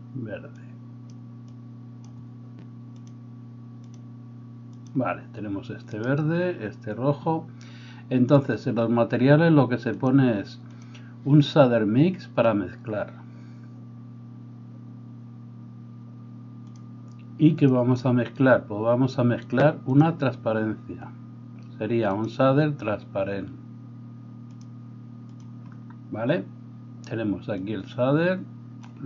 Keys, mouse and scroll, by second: 2.9 click, 3.1-11.5 middle drag, 5.9-11.5 right drag, 11.5-17.7 drag, 17.7-20.0 middle drag, 20.0-25.4 drag, 25.4-28.3 middle drag, 28.3-29.0 drag.